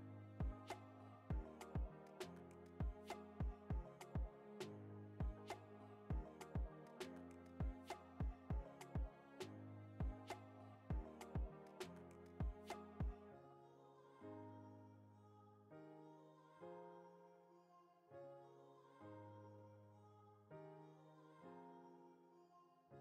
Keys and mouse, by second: 0.6 Tab, 0.9 middle click, 1.8 a, 2.6 shift+d, 5.6 g, 8.1 shift+d, 9.5 s, 10.7 s, 12.0 shift+d, 14.7 g, 16.7 ctrl+shift+z, 16.9 shift+d, 17.7 s, 19.1 shift+d, 20.9 click, 21.6 l, 22.8 click.